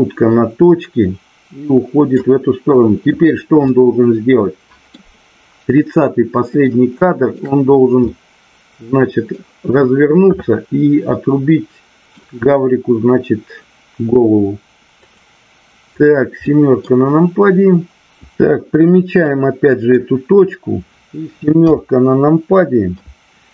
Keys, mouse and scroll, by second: 3.6-5.0 middle drag, 6.7-7.4 shift+middle drag, 8.0-9.4 middle drag, 11.1 middle click, 15.0 click, 16.5 middle click, 19.2-19.8 middle drag, 21.7 KP_7.